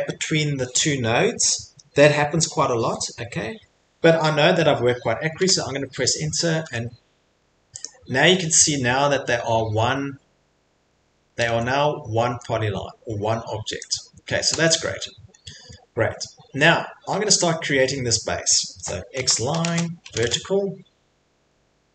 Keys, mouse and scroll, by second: 1.3 click, 5.4 Return, 6.6 Return, 7.8 click, 8.6 middle click, 8.6 middle click, 10.4 middle click, 10.4 middle click, 11.3 middle click, 11.5 Escape, 11.5 middle click, 12.3 Escape, 12.4 middle click, 13.9 click, 14.5 Escape, 14.9 middle click, 15.1 middle click, 15.3 middle click, 15.6 middle click, 16.4 middle click, 16.5 middle click, 16.5 middle click, 17.4 middle click, 18.3 middle click, 19.1-21.9 typing.